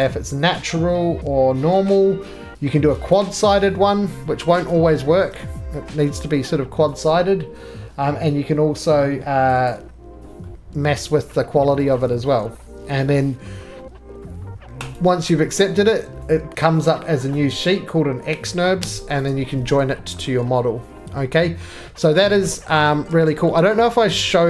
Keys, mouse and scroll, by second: 0.0 click, 3.1 click, 4.4-5.2 scroll, 5.2-5.9 shift+scroll, 6.0 shift+middle click, 6.0-6.6 scroll down 7, 6.6 middle click, 7.1 scroll down 1, 7.2 middle click, 9.7 click, 10.1-10.6 scroll, 11.3 scroll, 14.9 right click, 18.8 j, 19.3 click, 20.1 scroll down 1, 20.2 middle click, 20.2-21.1 scroll up 8, 21.1 middle click, 21.3-22.7 scroll up 3, 22.7 middle click, 22.9-23.7 scroll, 23.5 shift+middle click, 24.0 middle click, 24.3 3.